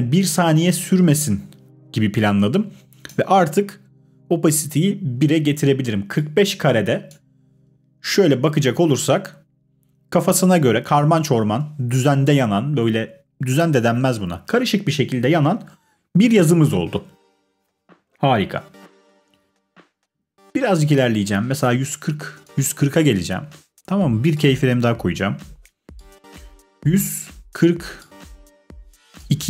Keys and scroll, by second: 8.0 space, 11.5 space.